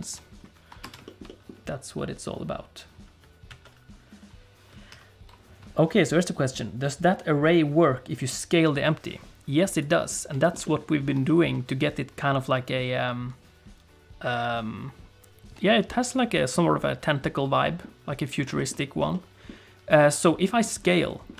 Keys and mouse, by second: 0.0 ctrl+space, 0.8 space, 1.0 shift+middle click, 1.2 middle click, 3.5 alt+a, 4.9 ctrl+s, 9.8 click, 10.4 shift+click, 10.6 middle click, 11.2 shift+middle click, 15.9 middle click, 16.8-17.8 middle drag, 18.6 shift+middle click, 19.1 middle click, 20.0 middle click, 20.9 middle click.